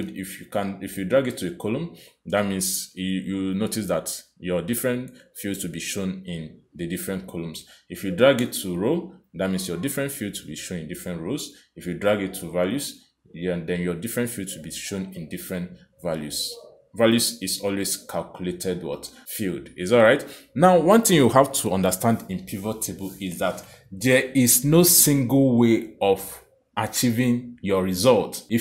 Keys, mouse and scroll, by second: 8.0 click, 12.1 click, 28.1 click.